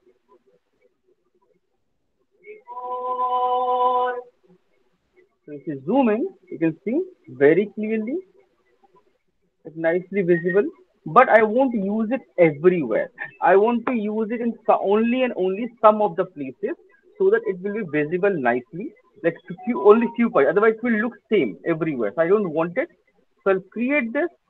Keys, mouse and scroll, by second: 0.5-1.5 scroll, 4.6 click, 5.5 alt+middle click, 5.8 alt+click, 6.4 alt+right click, 6.5 alt+right click, 6.9 alt+middle click, 7.5 alt+click, 8.2 alt+middle click, 9.2 alt+middle click, 11.0 alt+click, 11.5 alt+click, 11.9 alt+scroll, 14.2 alt+right click, 22.6-23.3 alt+scroll, 23.4 alt+middle click, 23.4-24.4 alt+click.